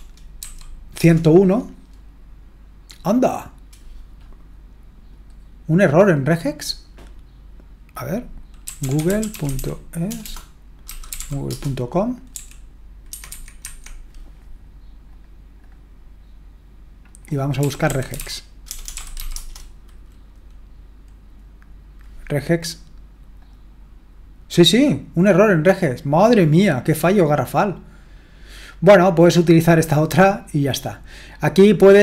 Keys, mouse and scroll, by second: 0.0-0.4 typing, 1.0 Return, 5.1-8.6 drag, 8.4-13.6 typing, 13.1 Escape, 13.3 Escape, 13.6 Escape, 15.1-17.6 drag, 17.4-19.7 typing, 23.4 click, 24.0-27.1 drag, 28.7-30.3 drag.